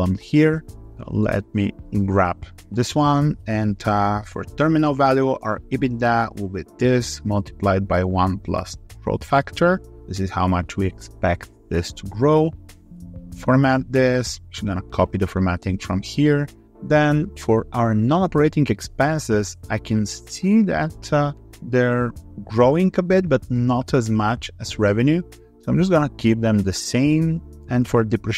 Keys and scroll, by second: 1.5 ctrl+c, 2.3 ctrl+v, 12.4 alt+2, 12.6 3, 14.5 alt+4.